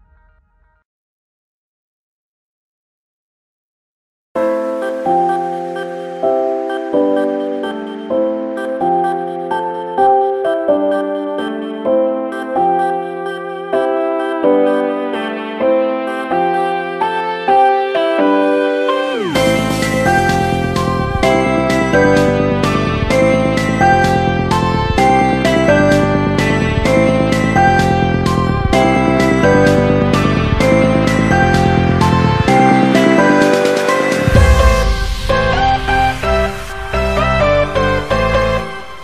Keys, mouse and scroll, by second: 0.4 click, 1.6 Tab, 2.4 click, 3.1 click, 4.2 click, 5.8 Tab, 6.5 a, 7.9-10.4 drag, 10.4 Tab, 11.3-13.9 drag, 13.9-14.4 scroll up 4, 14.4-15.4 shift+middle drag, 15.4-16.2 shift+scroll up 4, 16.2-20.0 middle drag, 20.8 click, 22.0 click, 22.5 shift+click, 24.1 KP_7, 26.5 click, 27.3 s, 29.2 r, 31.6-35.3 middle drag, 35.9 KP_1, 37.4 click, 38.5 shift+click.